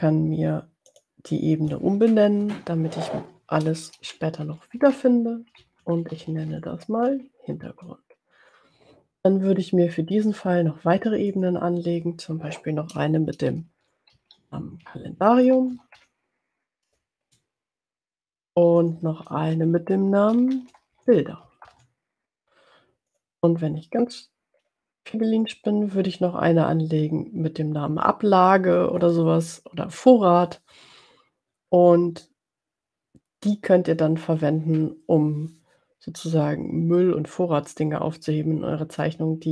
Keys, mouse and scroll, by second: 0.7 click, 1.4 click, 4.3-7.1 typing, 7.8 Return, 11.2 click, 13.6-16.5 typing, 17.2 Return, 18.9 click, 20.5-22.5 typing, 23.1 click, 39.1-39.5 drag.